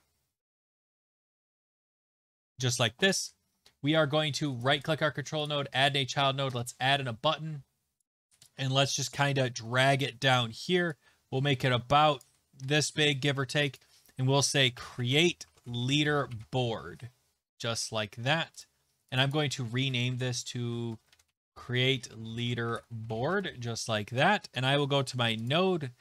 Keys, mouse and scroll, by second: 1.0 click, 3.2 click, 4.6 right click, 6.0 click, 6.5 Return, 8.2 click, 10.3 click, 12.2 click, 14.3-16.9 typing, 18.6 click, 19.2 click, 19.3 click, 20.1 ctrl+a, 20.3-23.6 typing, 25.5 click.